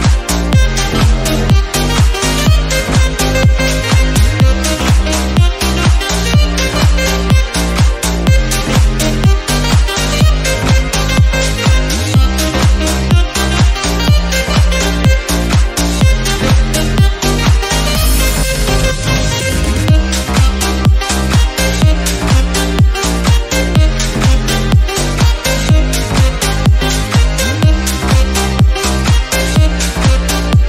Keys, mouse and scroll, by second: 0.2 Tab, 0.6 click, 0.8 shift+middle click, 1.7 ctrl+z, 1.9 shift+middle click, 2.1 shift+click, 2.5 ctrl+b, 3.1 middle click, 3.7 ctrl+z, 4.0 shift+click, 4.2 middle click, 4.7 ctrl+b, 6.0 middle click, 6.3 1, 6.4 click, 7.0 click, 8.2-8.6 scroll down 2, 8.9 shift+middle click, 9.0 scroll up 2, 9.2 click, 9.9 shift+middle click, 10.5 2, 10.9 click, 11.1 shift+middle click, 12.0 ctrl+z, 12.3 ctrl+z, 12.6 click, 13.2 scroll up 3, 13.5-14.8 drag, 14.8 scroll down 2, 14.9 middle click, 15.0 scroll up 2, 15.6 scroll down 1, 15.9 shift+middle click, 16.2 click, 16.6 Tab, 16.7-18.1 middle drag, 18.1 KP_3, 18.4 scroll down 2, 18.5 shift+middle click, 18.7 Tab, 19.0 1, 19.1 scroll up 1, 19.2 shift+middle click, 19.7 alt+z, 19.9 click, 20.7 g, 21.2 r, 22.1 shift+middle click, 22.4 click, 23.0 g, 23.7 r, 24.2 Tab, 24.3 click, 24.4 scroll down 2, 24.6 scroll up 2, 24.9 alt+z, 25.1 middle click, 25.4 click, 25.7 Tab, 25.8-26.4 scroll up 1, 26.4 click, 26.6 shift+middle click, 27.2 3, 27.2 click, 27.5 2, 27.6 click, 28.4-29.4 drag, 29.4 Tab, 29.5-30.3 scroll down 2, 30.3 /.